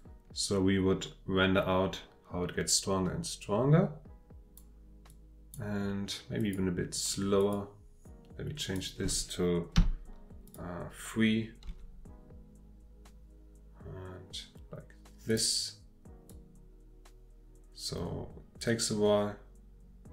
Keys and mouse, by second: 0.0-4.6 drag, 5.1-5.6 drag, 6.4 click, 7.0 click, 7.4 click, 8.6 click, 9.8 v, 11.7 g, 15.3 click, 16.3-20.1 drag.